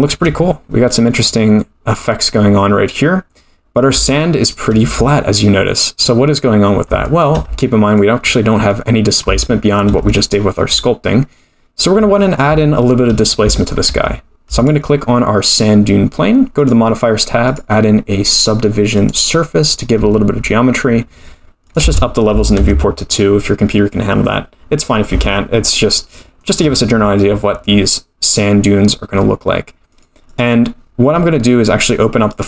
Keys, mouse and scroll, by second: 0.7-1.0 scroll up 2, 4.1 shift+middle click, 5.7 scroll down 1, 6.3-6.8 scroll down 2, 7.0 shift+middle click, 7.6 middle click, 8.2 scroll up 5, 8.7 middle click, 9.4 shift+middle click, 10.1 middle click, 12.2-12.6 scroll down 1, 12.6 shift+middle click, 13.1-13.4 scroll down 2, 13.5 shift+middle click, 14.6 click, 16.7 click, 17.4 click, 21.6 click, 24.6 scroll up 1, 25.2-26.5 shift+middle drag, 29.9 click.